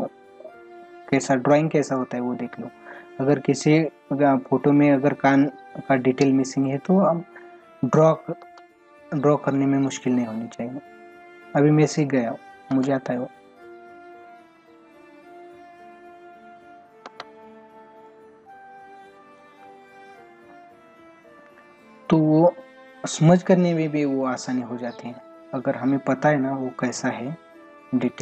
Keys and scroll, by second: 8.4 ctrl+alt+z, 12.7 ctrl+alt+z, 17.0 ctrl+alt+z.